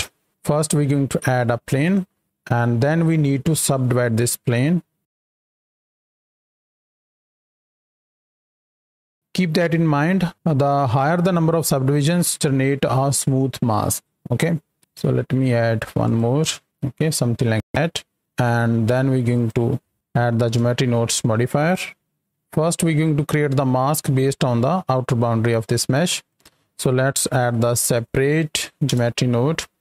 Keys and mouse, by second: 0.3 shift+a, 4.5 Tab, 5.5-7.3 typing, 14.8 w, 17.7 Tab, 19.3 click, 20.5 Home, 21.4 click, 26.0 drag.